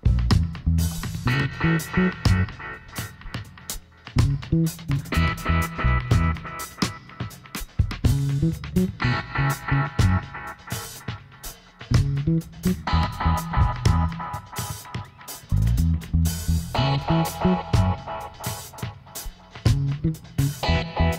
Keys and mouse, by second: 0.1 g, 5.2 click, 5.7 ctrl+z, 6.1 ctrl+z, 6.1 middle click, 7.0 ctrl+z, 7.5 ctrl+z, 8.6 ctrl+z, 9.3 middle click, 9.7 a, 10.1 a, 10.8 w, 14.3-17.7 right drag, 16.2-18.1 drag, 18.1 right click, 18.1 e, 19.0-21.1 middle drag, 20.2 ctrl+z.